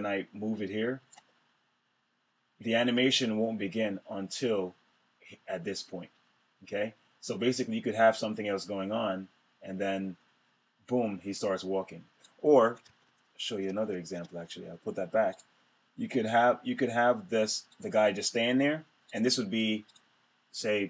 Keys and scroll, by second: 12.4 super+z.